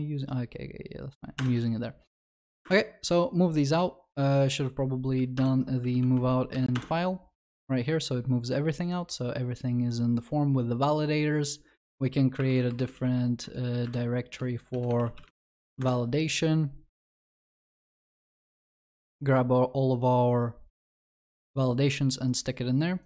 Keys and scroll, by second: 1.4 alt+Return, 12.5 alt+Insert.